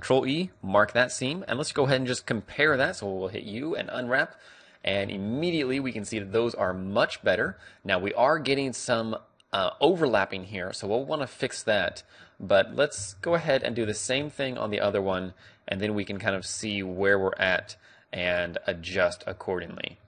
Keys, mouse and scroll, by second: 0.1 click, 0.6-2.9 middle drag, 1.5 a, 1.8 a, 2.9 u, 4.8-10.8 middle drag, 5.1 Tab, 6.3 Tab, 11.3-16.5 middle drag, 13.4 a, 16.5-17.8 right drag, 17.8-19.1 middle drag, 19.1 click, 20.0 click.